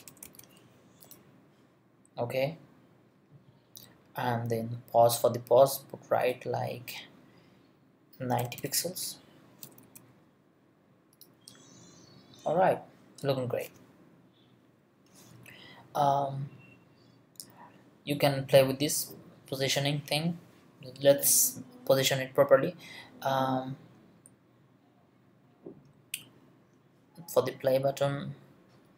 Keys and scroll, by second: 0.0-0.7 typing, 8.2-10.3 typing.